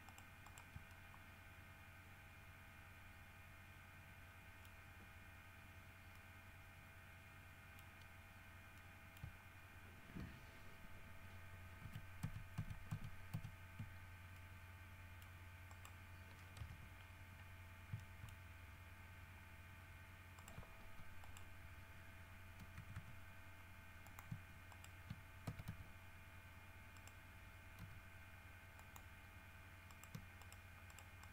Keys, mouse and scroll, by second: 0.3 shift+middle click, 0.6 shift+middle click, 1.1-5.0 shift+middle drag, 5.0 scroll up 1, 5.1 middle click, 6.4-8.2 middle drag, 8.6 scroll down 1, 9.0 middle click, 12.0 ctrl+z, 14.6-15.6 middle drag, 15.9 middle click, 16.8 KP_3, 17.8 scroll up 1, 18.2 shift+middle click, 18.4-19.1 shift+scroll up 2, 20.6 right click, 21.4 right click, 23.0 g, 24.3 shift+click, 24.9 shift+right click, 25.7 shift+w, 25.9 shift+s, 27.2 right click, 28.0 g, 29.0 click, 30.1 shift+right click, 30.6 shift+right click, 31.1 shift+right click.